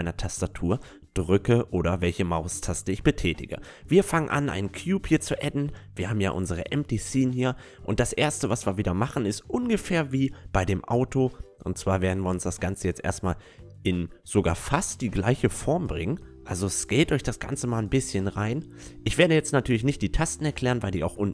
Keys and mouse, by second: 4.1-5.2 drag, 5.2-7.3 middle drag, 6.0 s, 9.3 s, 11.3 s, 15.3-18.0 middle drag, 17.3 Tab, 17.7 Tab, 18.1 a, 20.0 KP_5, 20.5 KP_1.